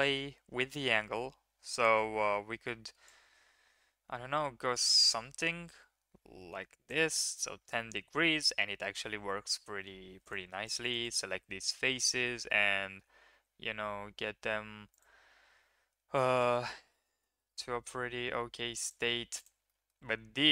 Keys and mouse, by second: 1.4 click, 3.0-6.8 drag, 9.9 3, 10.8 shift+click, 11.0 shift+click, 11.7 s, 15.3 s, 19.6 drag.